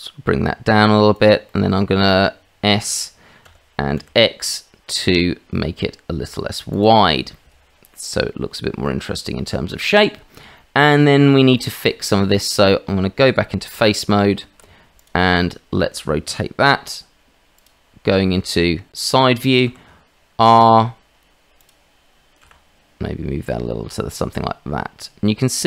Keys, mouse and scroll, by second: 1.5 middle click, 3.4 s, 7.3-10.0 middle drag, 10.5 shift+middle click, 11.0 middle click, 11.5 shift+middle click, 12.1 middle click, 13.8 Tab, 15.5 click, 17.5 click, 19.7 r, 22.4 g.